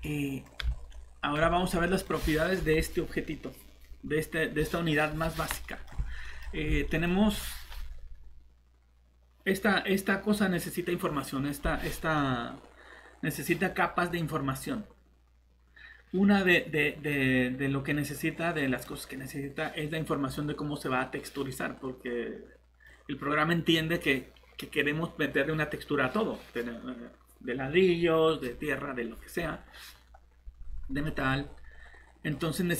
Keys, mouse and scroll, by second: 0.0 middle click, 0.7 a, 14.1-15.3 scroll up 1, 18.1 click, 20.3 middle click.